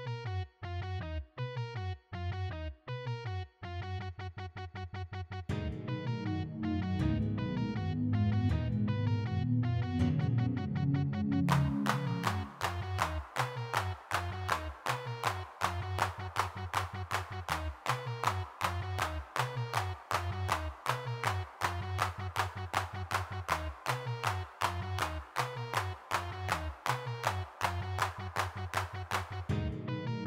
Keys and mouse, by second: 1.1 middle click, 2.1 3, 2.5 f, 2.6 click, 3.6-17.5 drag, 18.5 f, 19.0 click, 19.6 click, 19.8 middle click, 20.3 middle click, 21.0 shift+c, 23.2 middle click, 26.6 g, 26.7 f, 27.2 click, 28.5 middle click.